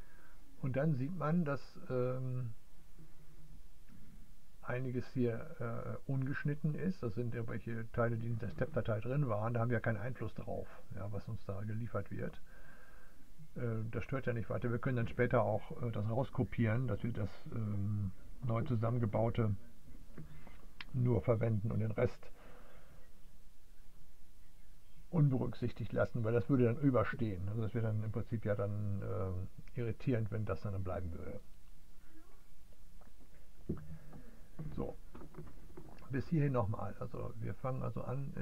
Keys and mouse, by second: 0.0-38.4 drag.